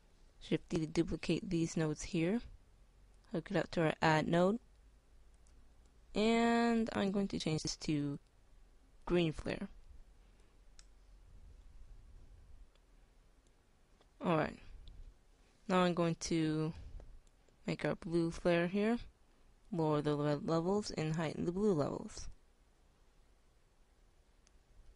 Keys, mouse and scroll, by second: 1.5 b, 1.5 shift+d, 4.2-6.5 drag, 6.9-10.3 drag, 21.8-24.9 drag.